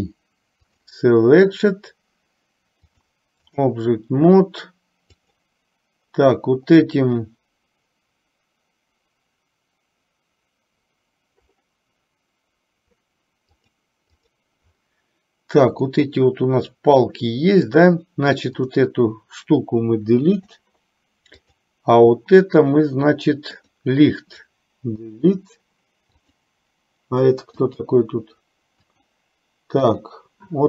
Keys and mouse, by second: 2.9-3.8 drag, 5.3 click, 13.7 click, 14.4 click, 15.9-18.1 middle drag, 20.3 Delete, 21.6 click, 23.7 click, 25.2 Delete, 26.3 click, 27.8 click, 29.1 click, 30.1 click.